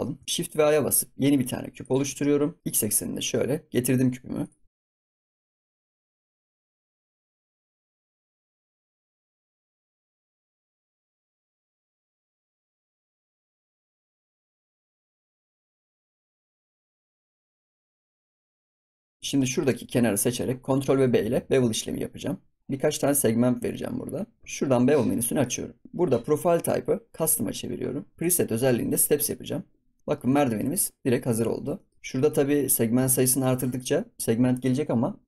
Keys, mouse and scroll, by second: 0.2 shift+middle click, 0.6 shift+a, 2.2 scroll down 4, 2.6 middle click, 2.7 g, 4.6 middle click, 4.8 KP_Decimal, 4.9 ctrl+z, 5.1 g, 5.5 shift+middle drag, 5.6 scroll down 1, 5.7-6.0 middle drag, 6.0 scroll up 1, 6.1 middle click, 6.5 s, 6.7 g, 6.9-7.4 middle drag, 7.4 ctrl+s, 8.0 KP_1, 8.1 scroll up 7, 8.2 scroll down 1, 8.4 shift+middle drag, 8.6 scroll up 1, 8.6 shift+middle click, 8.7 g, 9.2 ctrl+s, 9.3 scroll down 1, 9.4 click, 9.4 shift+middle click, 9.5 ctrl+s, 9.6 ctrl+s, 9.9 click, 10.0 scroll up 2, 10.1 shift+middle click, 10.2 ctrl+s, 10.2 shift+middle drag, 11.1 click, 11.2 ctrl+s, 11.3 click, 11.6 ctrl+s, 11.6-12.1 scroll down 2, 11.8 shift+middle drag, 12.1 g, 12.7 click, 12.8 scroll down 1, 13.0 middle click, 13.1 scroll up 4, 13.2 middle click, 13.3 middle click, 13.5 click, 13.5 g, 13.8 click, 13.9 scroll down 3, 14.0 middle drag, 14.2 scroll up 1, 14.2 middle click, 14.3 click, 14.6 middle click, 14.7-17.3 typing, 15.1 middle click, 15.8 middle click, 17.1 ctrl+s, 17.2 middle click, 17.2 scroll up 4, 17.7 ctrl+s, 17.8-18.3 scroll down 4, 17.9 click, 17.9 middle drag, 18.3 middle drag, 18.4 scroll up 10, 18.6 scroll down 4, 18.7 middle drag, 18.9 drag, 19.0 Tab, 19.2 drag, 19.3 scroll up 1, 19.4 middle drag, 19.6 Tab, 20.2 middle click, 21.0 ctrl+b, 24.4 ctrl+b, 25.4-26.7 drag, 27.1 click, 28.1-29.7 drag, 29.7 scroll down 3, 30.0 middle click, 30.7-31.0 scroll up 3, 31.1 ctrl+s, 31.5 shift+middle click, 31.7 scroll up 1, 33.1-35.2 drag.